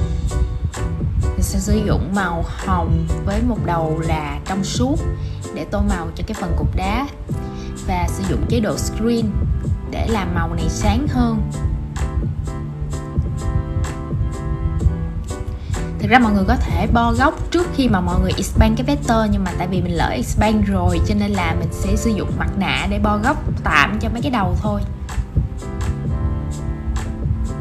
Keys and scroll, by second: 14.3 super+c, 16.1 shift+super+v, 20.3 super+7.